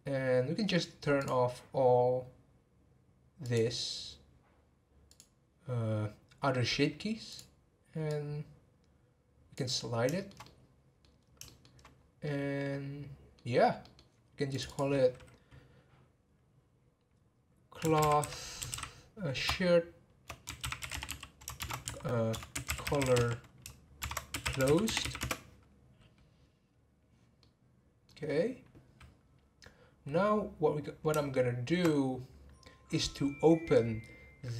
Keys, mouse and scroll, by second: 1.1 click, 3.4 click, 5.1 click, 7.3 click, 8.0-10.1 drag, 10.1-11.2 shift+middle drag, 11.2 scroll up 2, 11.4 shift+middle click, 12.0 scroll up 1, 12.2-14.5 middle drag, 14.5 click, 27.4-29.3 middle drag, 29.3-31.3 scroll down 3, 31.3-34.4 shift+middle drag.